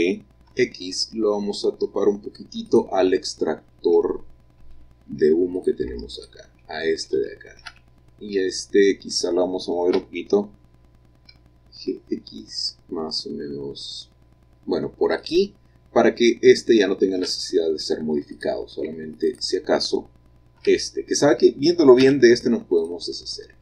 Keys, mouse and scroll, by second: 0.6 x, 2.8 click, 4.5 middle click, 5.3 shift+scroll up 1, 5.4 shift+middle click, 5.7-7.0 shift+drag, 7.2-8.0 scroll down 2, 8.0-9.3 middle drag, 10.1 g, 11.4 x, 15.3 click, 17.4 middle click, 17.8 middle click, 18.5 click, 19.5 click, 20.7 l, 22.2 x, 22.9 click, 23.5-23.6 scroll down 1.